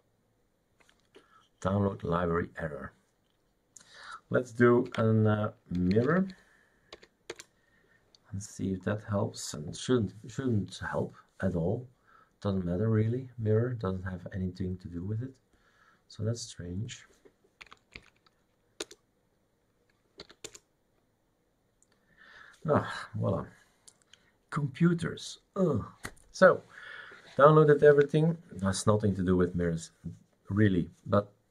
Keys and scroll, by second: 4.9 ctrl+c, 5.5-7.0 typing, 7.3 Return, 17.7 Up, 18.0 Up, 18.9 Return, 20.4 y, 20.5 Return.